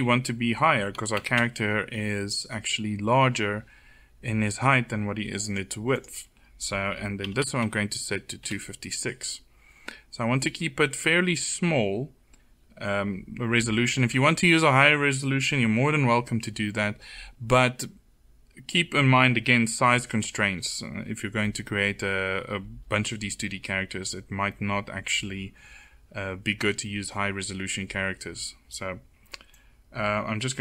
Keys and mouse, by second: 5.5-7.3 drag, 29.0-30.6 drag.